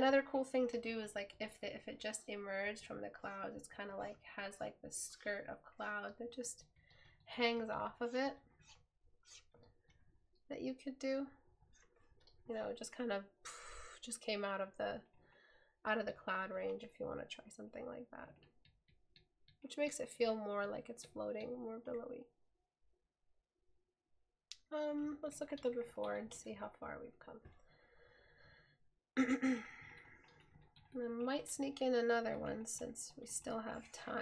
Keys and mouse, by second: 28.0 right click.